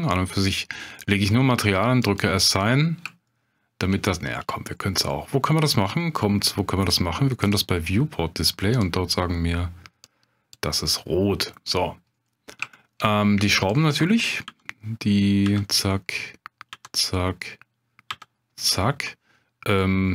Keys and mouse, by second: 3.3 shift+click, 7.5 click, 8.7 click, 12.7 shift+click, 14.4 l, 15.4 l, 15.8 click, 16.7 l, 17.1 click, 18.1 l, 18.8 click.